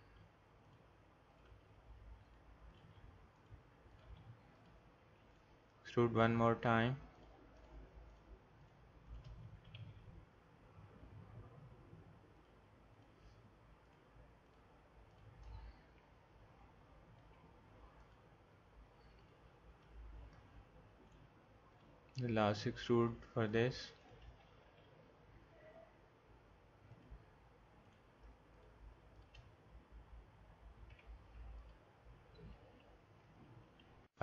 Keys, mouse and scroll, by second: 0.0 g, 1.5 g, 2.8 g, 4.0 g, 4.5 click, 9.8 e, 12.9-17.1 drag, 17.2 alt+m, 24.7 e, 27.9-30.8 drag, 30.8 alt+m.